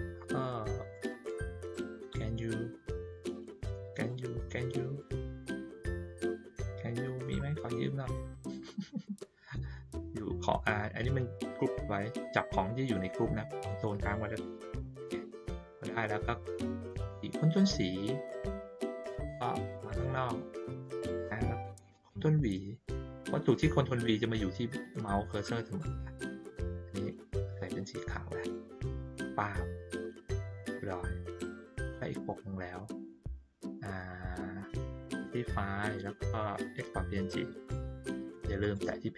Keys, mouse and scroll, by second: 0.9 middle click, 1.7 middle click, 3.1 click, 3.9 click, 4.9 click, 5.4 middle click, 6.3 middle click, 8.0 click, 11.0 click, 12.5 click, 14.0 ctrl+click, 19.6 click, 20.3 middle click, 25.8-27.1 drag, 28.4 click, 29.9 ctrl+middle click, 30.7 ctrl+middle click, 30.7-31.2 ctrl+scroll down 1, 32.1 click, 35.1 click, 36.6 click, 38.6 click.